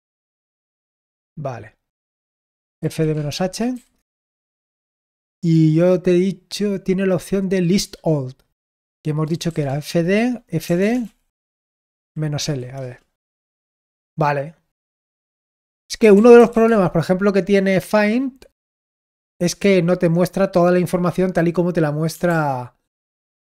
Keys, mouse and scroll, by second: 0.0-1.2 typing, 2.5-4.2 typing, 9.0-12.8 typing, 15.7-16.9 typing, 18.5 Return, 22.2 ctrl+p, 22.9 ctrl+p.